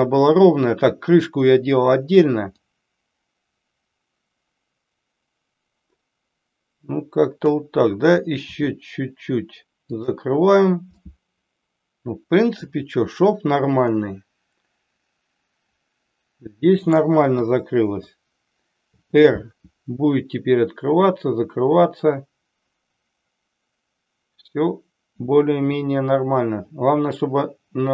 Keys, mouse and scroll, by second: 2.5-7.5 drag, 8.5 r, 9.9 click, 10.9-12.7 middle drag, 13.9-17.0 middle drag, 17.4 KP_3, 18.8 r.